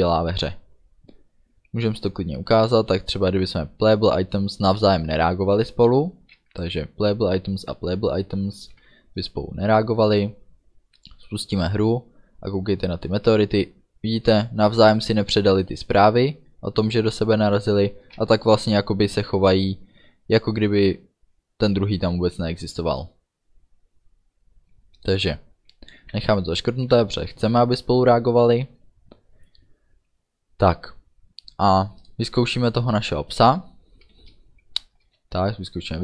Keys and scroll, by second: 8.6 ctrl+s, 26.2 ctrl+s, 35.1 space.